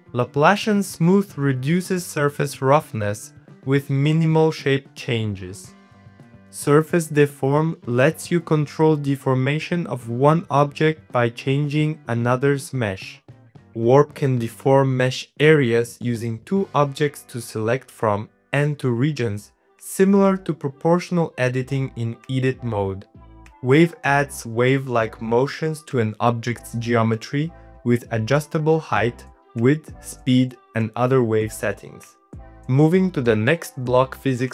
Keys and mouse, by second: 0.0 middle click, 1.0 click, 2.3-3.5 middle drag, 4.0-5.0 drag, 5.1 middle click, 6.0 click, 6.3 click, 6.6 middle click, 7.1 middle click, 7.6 click, 8.5 click, 8.7 Tab, 8.7 click, 8.9-11.1 typing, 9.4 middle click, 10.1 click, 10.1 middle click, 10.7 ctrl+z, 10.7 middle click, 10.9 ctrl+z, 12.8 middle click, 13.0 g, 13.5 middle click, 13.7 g, 14.2 click, 14.6 click, 15.1 g, 15.5 shift+click, 16.2 shift+click, 16.6-18.5 drag, 18.5 click, 19.2 click, 19.4 click, 19.9 click, 20.4-21.5 drag, 21.8 click, 22.3 click, 22.8 g, 24.0 click, 24.8 middle click, 26.9-28.5 drag, 28.5 middle click, 30.1-31.7 drag, 32.1 middle click, 32.9 middle click, 34.2 click.